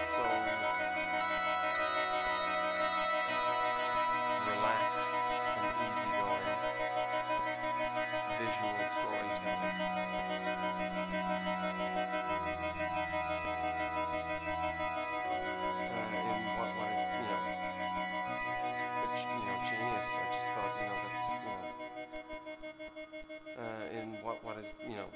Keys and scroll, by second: 11.5 super+-, 17.5 e, 21.6 Return.